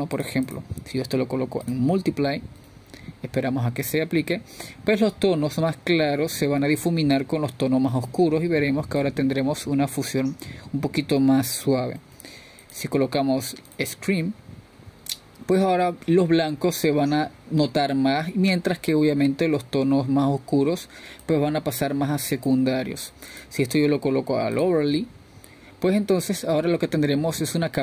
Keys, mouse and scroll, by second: 5.0-6.2 drag, 6.2-12.5 middle drag, 12.5-18.9 drag, 24.7-26.4 drag.